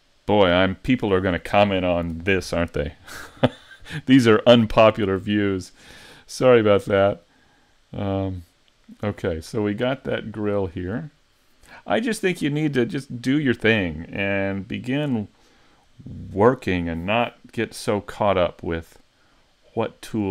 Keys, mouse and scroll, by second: 4.5 middle click, 6.5 middle click, 10.4 shift+middle click, 18.6 middle click.